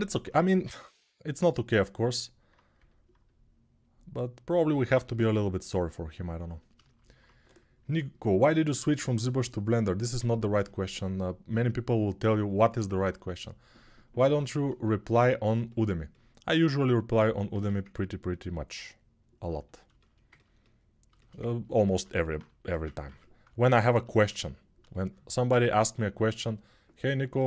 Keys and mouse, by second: 17.3 alt+q, 21.7 alt+q, 22.9 ctrl+r.